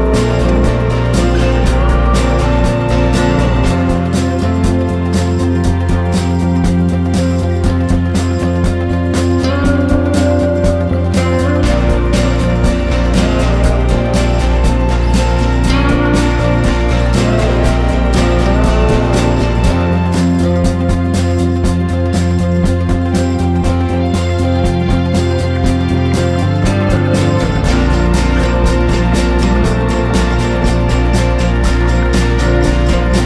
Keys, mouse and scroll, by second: 2.1 ctrl+scroll up 1, 2.8 scroll up 1, 3.9-30.1 drag, 31.9 ctrl+scroll down 1.